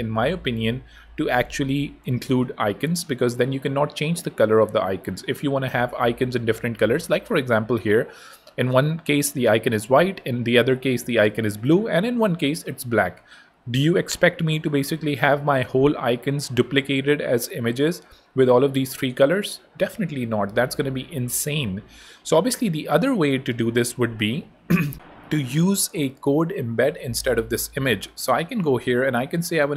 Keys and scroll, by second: 20.7 super+Tab, 23.8 super+Tab, 27.4 super+l, 28.0 super+BackSpace, 28.3 super+k, 28.6-29.4 typing, 29.5 Return.